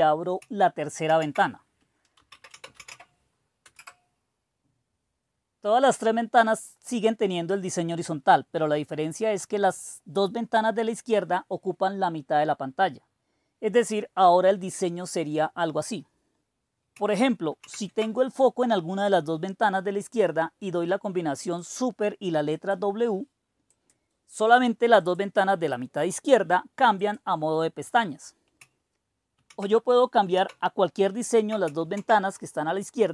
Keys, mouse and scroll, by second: 0.0 super+h, 1.0 super+d, 1.9-3.3 typing, 3.7 Return, 17.5 super+w, 21.5 click, 22.5 click, 23.7 click, 24.2-29.4 drag, 29.4 super+e, 30.3 super+e, 31.9 super+s.